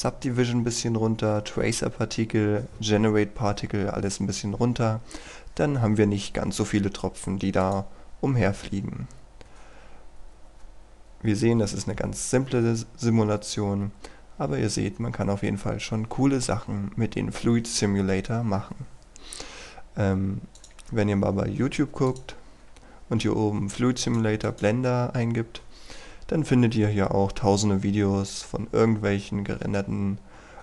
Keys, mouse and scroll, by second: 25.7-28.4 scroll down 1.